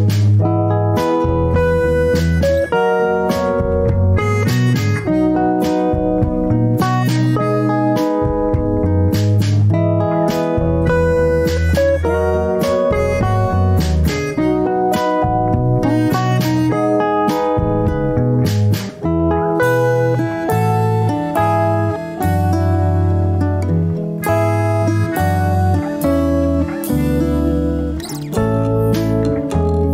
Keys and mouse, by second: 1.9-2.4 shift+middle drag, 3.5 ctrl+r, 9.9 ctrl+r, 14.9 ctrl+r, 19.7 shift+middle click, 20.9 ctrl+r, 26.8 ctrl+r.